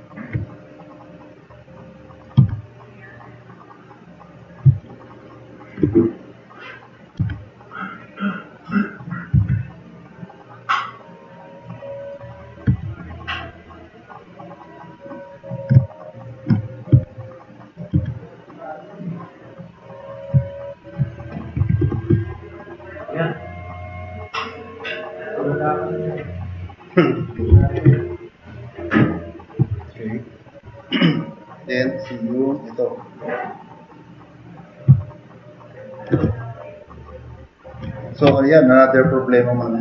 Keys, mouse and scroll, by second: 0.0 click, 1.3-2.2 drag, 2.4 e, 3.0 click, 5.3 middle click, 5.9 q, 6.3-7.0 drag, 7.2 e, 9.4 r, 12.7 w, 16.9 q, 17.9 e, 19.0 click, 21.3-22.3 typing, 22.2-22.7 drag, 22.8 click, 23.4-23.9 drag, 24.1 click, 26.0 click, 27.5 4, 29.7 drag.